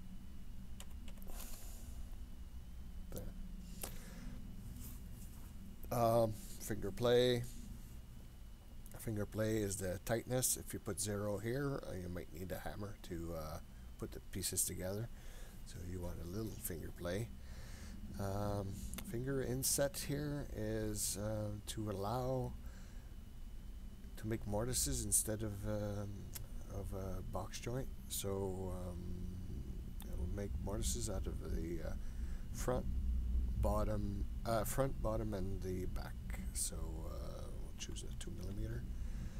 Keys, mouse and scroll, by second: 3.3-4.7 scroll down 3, 3.9-4.7 scroll up 1, 7.9 scroll up 1, 22.5-39.3 drag.